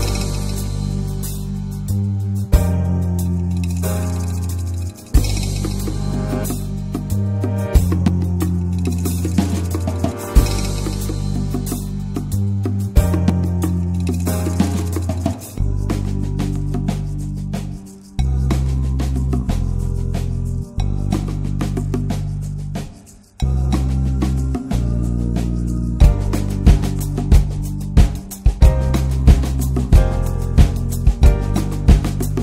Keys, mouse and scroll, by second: 0.3 click, 0.5 alt+middle click, 1.0 shift+d, 1.8 click, 2.7 s, 3.7 s, 4.6 shift+middle click, 4.7 scroll up 1, 4.9 3, 5.5 click, 5.9 alt+shift+click, 6.1 alt+shift+click, 6.5 s, 7.7 click, 7.9 s, 12.2 middle click, 12.6 click, 12.9 middle click, 13.5 shift+click, 13.9 middle click, 14.5 s, 17.0 Tab, 17.1 click, 17.2 scroll down 1, 17.4 alt+middle drag, 17.6 click, 18.0-19.6 middle drag, 19.6 Tab, 19.8 middle click, 20.1 click, 20.8 l, 21.6 click, 21.9 l, 22.4 shift+d, 23.4 shift+middle click, 24.0 click, 25.1 ctrl+z, 25.7 click, 27.2 shift+middle click, 27.3 shift+scroll up 1, 27.5 s, 28.3 s, 30.1 click, 31.0-31.5 scroll up 3, 31.2 shift+middle click, 31.5 s.